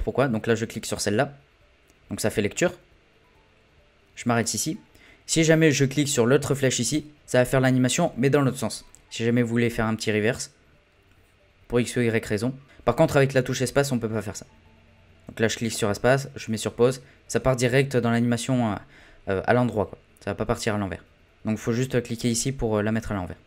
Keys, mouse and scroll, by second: 0.8-3.9 drag, 4.3-9.9 drag, 12.6 click, 13.6 space, 15.8 space, 16.7 space, 17.3 space, 22.2-23.4 drag.